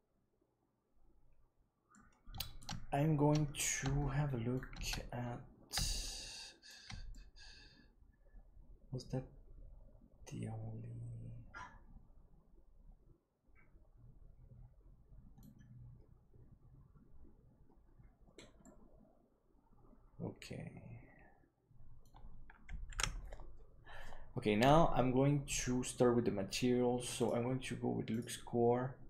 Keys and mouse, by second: 1.9-2.6 middle drag, 3.9-4.5 shift+middle drag, 5.9-6.6 shift+middle drag, 7.1-15.3 middle drag, 18.6-22.0 middle drag, 23.1 ctrl+s, 28.1-29.0 drag.